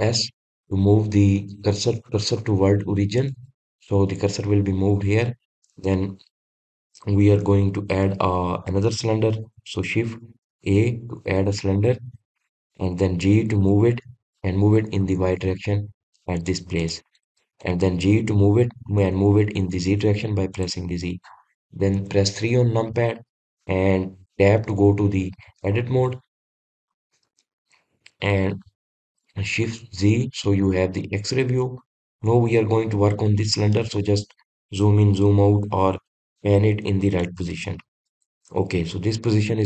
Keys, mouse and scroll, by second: 1.0 shift+s, 11.7 shift+a, 18.0 click, 18.7 drag, 19.6 g, 23.2 KP_3, 25.8 Tab, 27.2 Tab, 29.2 click, 30.9 shift+z, 31.8-34.8 shift+middle drag, 34.9-38.1 shift+middle drag.